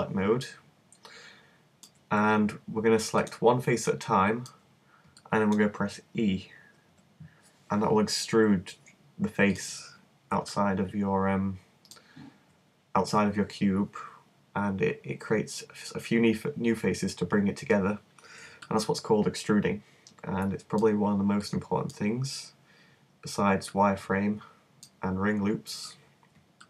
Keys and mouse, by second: 4.0 middle click, 6.9 e, 10.5 click, 11.5-13.8 middle drag, 18.6-20.4 middle drag, 21.5-23.7 middle drag, 23.7-25.6 drag, 25.6-26.6 middle drag.